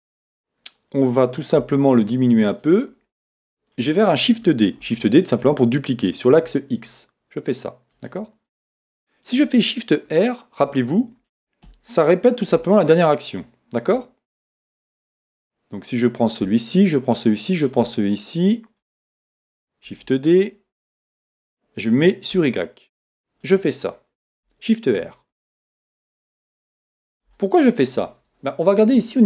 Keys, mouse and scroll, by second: 2.8 click, 3.4-10.1 shift+middle drag, 4.8 shift+d, 10.1 shift+r, 12.7-15.9 shift+middle drag, 15.9 click, 16.8 shift+click, 17.6 shift+click, 18.2-23.6 middle drag, 19.9 shift+d, 23.6 click, 25.0-29.1 middle drag, 27.9-29.0 scroll up 2.